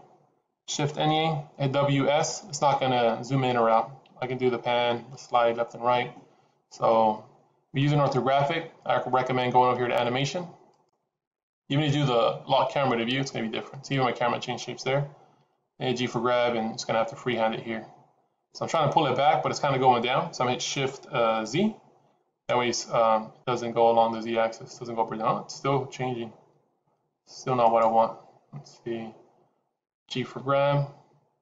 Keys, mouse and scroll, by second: 0.8 shift+`.